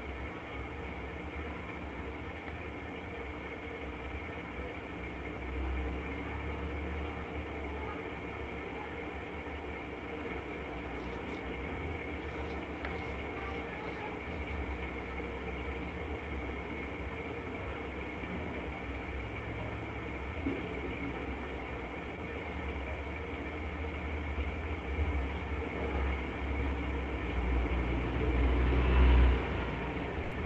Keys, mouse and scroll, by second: 0.5 click, 0.7 click, 1.9-3.7 alt+click, 2.3 alt+click, 3.1 click, 3.7 click, 4.1 click, 4.3 click, 4.7 click, 5.5 click, 5.7 click, 6.1 click, 6.5 click, 7.0 click, 7.2 click, 7.6 click, 7.8 click, 8.5 click, 8.9 click, 9.7 click, 10.1 click, 10.3 click, 10.7 click, 11.1 click, 12.3 click, 13.0-13.5 alt+click, 13.5 ], 13.7 ], 14.7 click, 15.5 click, 16.7 click, 17.0 alt+click, 17.2 click, 17.5 click, 17.7 click, 18.0 alt+click, 18.7 click, 19.1 click, 19.6 click, 19.8-21.3 middle click, 21.3 click, 21.6 click, 22.8 click, 23.6 click, 23.7 click, 24.7 click, 24.7 middle click, 26.0 click, 27.0 right click, 27.2 middle click, 27.2 click, 27.4 click, 27.9 click, 28.7 click, 29.8 click.